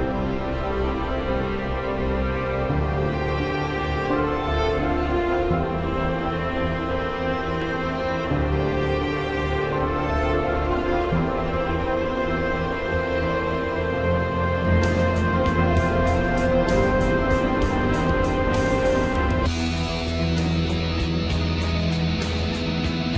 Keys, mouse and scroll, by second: 1.3 click, 2.4 ctrl+k, 3.5 click, 5.2 F4, 7.4 F2, 7.6-10.1 drag, 10.1 typing, 10.7 F4, 12.8 typing.